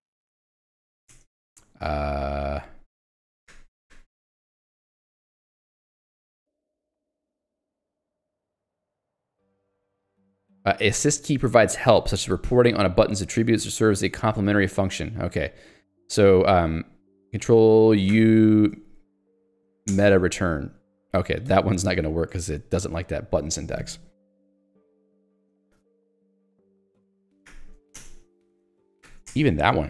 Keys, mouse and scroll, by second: 0.0-0.9 typing, 1.3 Return, 3.6 ctrl+u, 4.6 j, 6.4-8.4 typing, 8.6 Return, 9.6 n, 13.0 j, 13.5 l, 16.1 k, 18.2 ctrl+alt+u, 19.9 alt+Return, 21.5 Escape, 21.8 j, 22.5 ctrl+d, 25.9 k, 27.5 ctrl+alt+u, 28.0 alt+Return, 29.1 ctrl+alt+u, 29.3 alt+Return, 29.7 Escape.